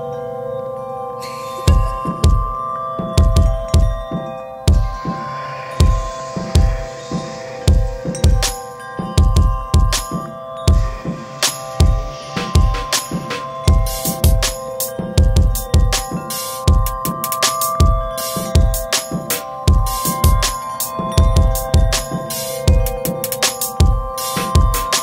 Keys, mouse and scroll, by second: 3.1 click, 3.9 right click, 4.3-4.6 scroll up 1, 5.2 right click, 6.9 click, 10.5 right click, 13.0 click, 14.4 right click, 14.9 scroll down 1, 16.2 click, 19.0-19.4 scroll down 1, 19.7 right click, 20.5 scroll up 1, 21.2 scroll up 1, 21.4 right click, 23.0 right click, 24.7 click.